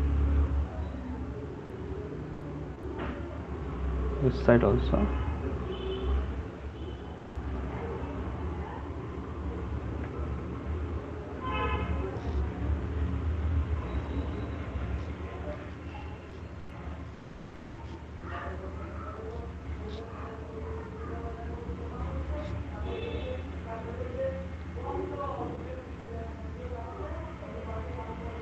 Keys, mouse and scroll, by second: 0.5 click, 1.1 click, 1.4 click, 1.5 click, 3.0 click, 3.6 click, 4.0 click, 4.2 click, 5.2 alt+click, 5.4 click, 6.0 click, 6.2 click, 6.8 click, 7.4 click, 8.2 click, 8.6 click, 9.2 click, 10.1 click, 10.7 click, 11.1 click, 11.7 click, 12.1 click, 14.2 alt+click, 15.1 click, 15.3 alt+click, 15.4 click, 16.7 alt+click, 17.0 click, 20.5 click, 23.5 click, 23.9 click, 24.6 click, 25.5 click, 25.7 click, 26.6 click, 27.4 click, 27.8 click.